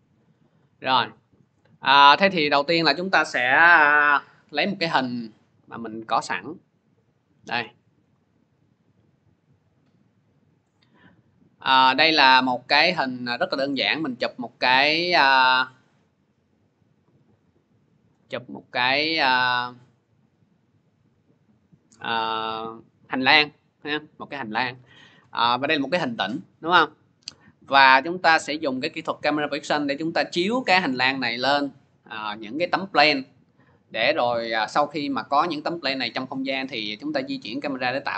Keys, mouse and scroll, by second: 0.5 click, 2.2 click, 2.4 click, 4.3 scroll, 5.2-5.9 scroll, 7.1 click, 7.6 click, 7.8 click, 10.4 click, 11.6 scroll, 13.5 click, 14.0 middle click, 15.6-16.1 scroll, 16.5 middle click, 17.9 click, 18.4 middle click, 21.8 click, 26.0 click, 26.4 middle click, 27.4 middle click.